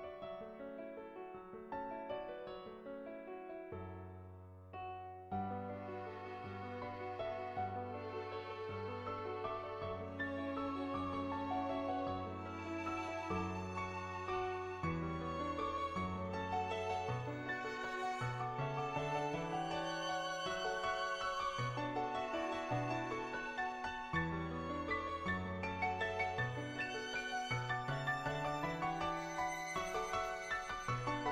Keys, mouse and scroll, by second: 1.8 click, 7.9 ctrl+z, 9.2 click, 9.9 ctrl+z, 12.0 ctrl+z, 12.7 click, 13.7 click, 15.1 click, 16.0 ctrl+z, 16.4 click, 17.7 click, 19.0 click, 19.6 click, 20.0 ctrl+z, 20.2 click, 21.4 click, 21.9 click, 22.5 click, 22.7 click, 24.0 shift+middle click, 24.8 shift+middle click, 25.0 middle click, 25.5 shift+middle click, 25.8 middle click, 27.6 click, 28.1 click, 28.9 click, 31.1 click.